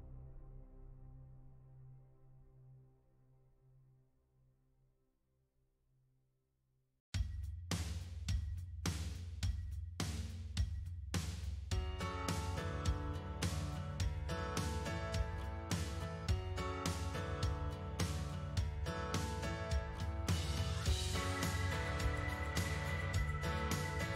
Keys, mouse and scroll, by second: 6.3 f, 8.0-10.6 drag, 13.6-15.3 middle drag, 15.3-18.1 drag, 19.8-20.8 middle drag, 20.8-23.4 drag, 23.4-24.1 middle drag.